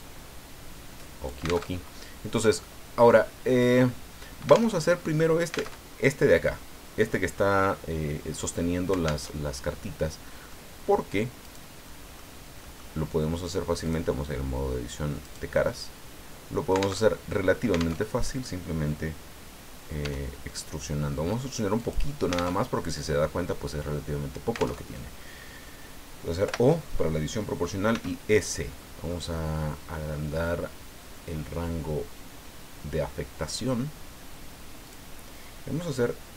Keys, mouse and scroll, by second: 0.0-1.6 drag, 1.7 alt+Tab, 4.7 alt+Tab, 5.7 alt+Tab, 9.2 alt+Tab, 10.5 click, 11.4 right click, 11.8 middle click, 12.6 middle click, 13.8 right click, 15.2 right click, 15.6-17.0 middle drag, 17.0 alt+Tab, 18.0 alt+Tab, 20.0 e, 21.8 click, 22.5 alt+Tab, 24.8 alt+Tab, 26.4 o, 27.9 s, 28.8 scroll up 2, 30.2 scroll down 2, 30.7-31.4 scroll down 4, 34.9 click.